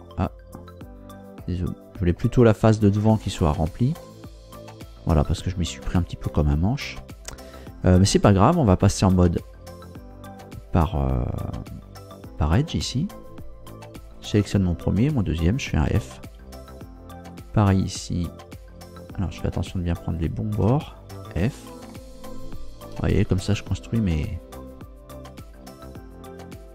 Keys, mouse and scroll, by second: 0.3-0.6 scroll down 1, 1.4 middle click, 2.5 scroll up 1, 3.3 shift+middle click, 4.3-4.9 shift+scroll up 3, 4.9 scroll down 2, 5.6-6.2 scroll down 4, 6.9 scroll down 2, 9.7 click, 14.0 right click, 15.0 shift+right click, 15.9 shift+f, 17.3 right click, 18.8-19.1 scroll up 2, 20.2 shift+right click, 21.1 f, 21.9-23.0 shift+middle drag, 23.8-24.5 scroll up 2, 25.3 right click, 26.6 shift+right click.